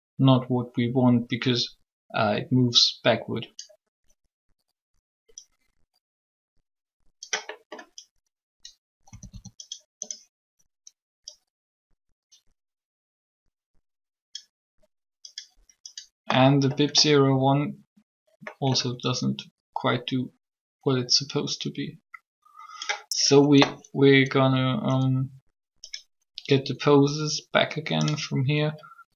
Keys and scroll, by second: 9.1 a, 9.1 a.